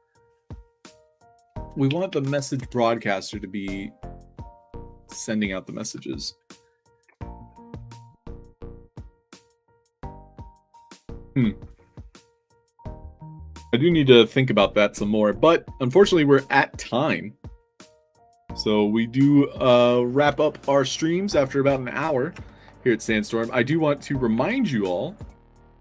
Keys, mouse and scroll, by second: 6.6 alt+right drag, 6.8-8.3 typing, 8.2 click, 8.9-9.2 alt+drag, 9.4 d, 10.1-10.7 alt+drag, 12.5 middle drag, 22.5 alt+drag, 22.7 alt+click, 24.4 alt+Tab, 25.0 alt+click.